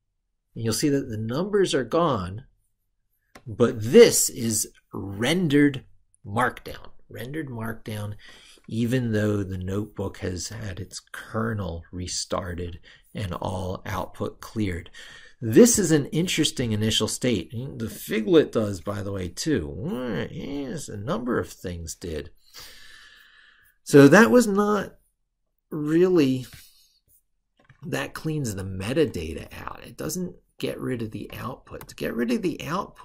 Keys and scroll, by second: 28.0 ctrl+super+Right, 31.6 ctrl+super+Left.